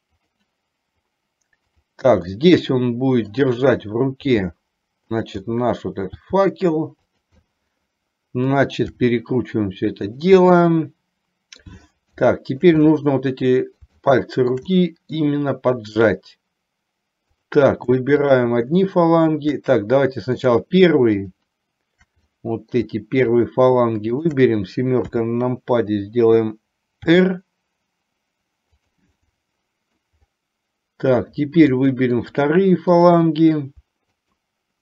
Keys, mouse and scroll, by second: 1.8 click, 2.5-3.5 middle drag, 4.6 g, 5.5 middle click, 6.1 scroll down 1, 6.4 g, 7.5-8.5 middle drag, 8.5 scroll down 1, 9.1 r, 10.5-11.8 middle drag, 12.4 shift+middle click, 12.9-13.9 middle drag, 14.0 shift+middle click, 14.9 middle click, 17.4 click, 18.3 shift+click, 20.5 click, 21.3 shift+click, 22.5 middle click, 23.5 shift+click, 24.1 shift+click, 25.3 KP_7, 27.3 r, 29.3 middle click, 31.9 middle click, 33.1 click.